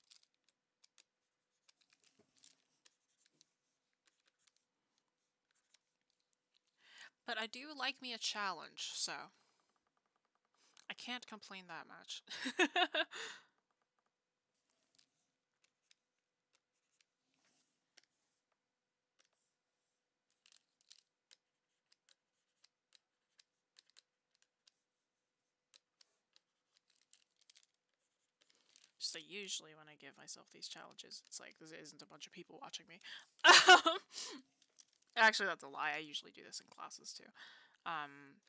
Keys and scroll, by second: 9.4 ctrl+z.